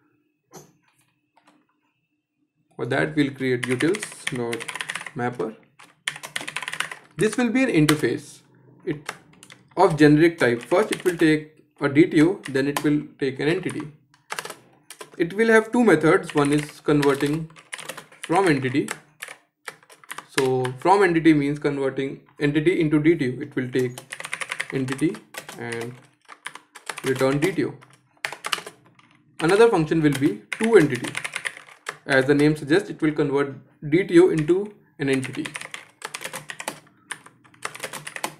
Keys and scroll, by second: 14.0 shift+Return, 27.8 Escape, 31.4 shift+Return.